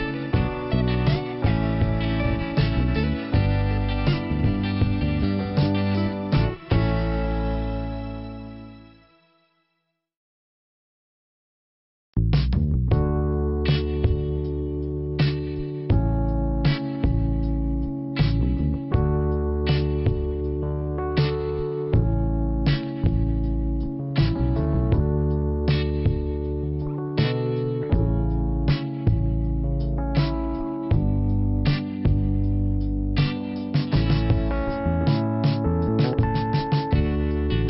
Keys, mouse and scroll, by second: 3.7 click, 3.9 click, 4.2 click, 4.2 double click, 6.5 click, 6.6 click, 10.7 click, 10.8 click, 11.8 click, 13.0 click, 14.0 click, 14.4 click, 15.6 click, 17.0 click, 17.6 click, 17.8 click, 20.0 click, 20.2 click, 22.3 click, 25.5 click, 25.6 click, 25.7 click, 25.8 click, 27.3 click, 30.1 click, 31.1 click, 33.2 click, 36.2 click, 36.3 click.